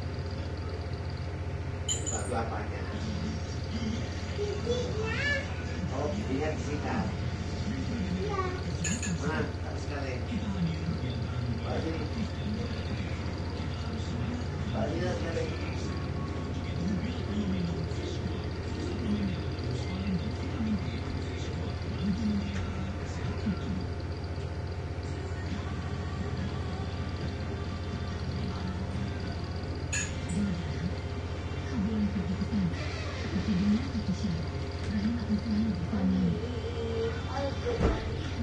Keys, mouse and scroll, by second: 1.0 click, 2.9-5.8 drag, 6.9 click, 8.5 shift+click, 10.1-11.7 drag, 13.1 click, 15.2 click, 18.1 click, 19.5 2, 21.2 ,, 22.2 9, 22.6 Return, 24.0-27.3 drag, 30.5 click, 33.4 click, 34.9 ctrl+c, 35.8 click, 37.3 click, 38.3 ctrl+v.